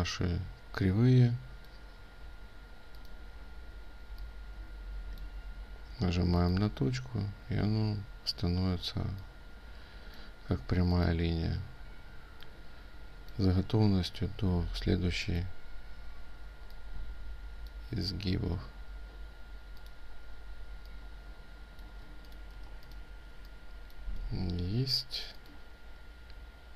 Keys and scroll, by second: 22.5 ctrl+alt+space.